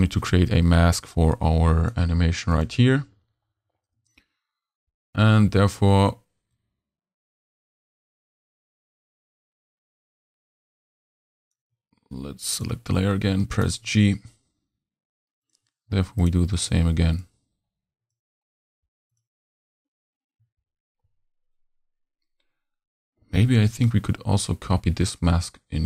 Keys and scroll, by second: 4.0 m, 13.6 g.